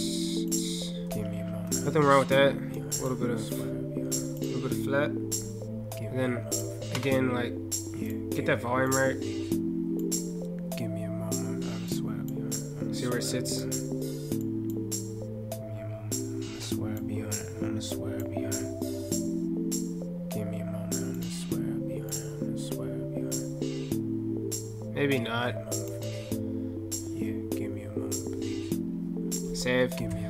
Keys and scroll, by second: 29.8 ctrl+F8.